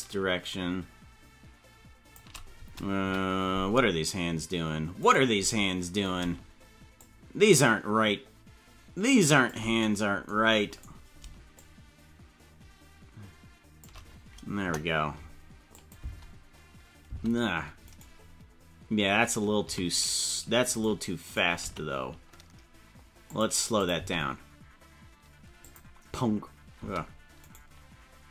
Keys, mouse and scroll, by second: 3.0 KP_Decimal, 3.6-4.0 scroll down 5, 5.1 right click, 6.9-9.6 shift+drag, 10.8 right click, 11.5-13.8 shift+drag, 14.6 KP_0, 15.7 click, 15.9 space, 17.1 space, 17.9 right click, 19.6 a, 20.6 right click, 21.2 right click, 21.6 g, 23.8 click, 23.9 space, 25.6 click, 26.7 space, 27.5 right click.